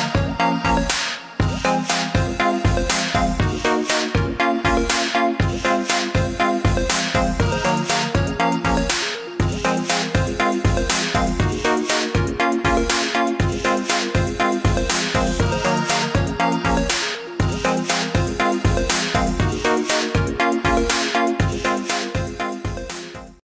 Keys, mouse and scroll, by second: 0.7 click, 2.8 alt+scroll down 1, 3.4 alt+scroll down 1, 4.7 click, 7.7 alt+click, 11.3 click, 14.9 click, 17.5 click, 19.1 right click, 19.7 click.